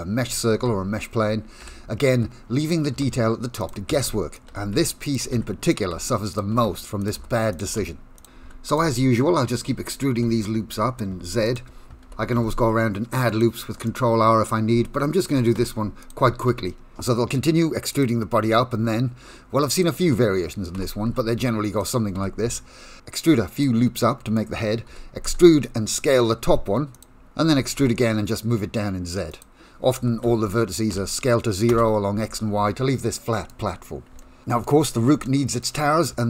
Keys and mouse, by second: 0.5 Tab, 1.5-12.0 typing, 13.9 shift+middle click, 15.3 e, 16.5 s, 20.7 e, 22.1 e, 23.6 middle click, 24.9 e, 27.4 e, 30.0 e, 32.9 shift+middle click, 34.1 shift+middle click, 35.2 shift+middle click.